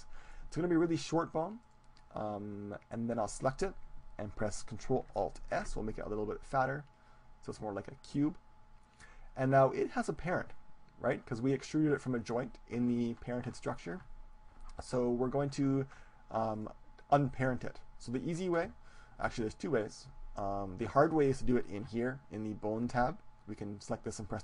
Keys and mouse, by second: 1.6-3.6 right drag, 5.6 ctrl+alt+s, 8.0-10.1 drag, 16.4-18.5 right drag, 19.9-22.4 drag, 23.8-24.4 drag.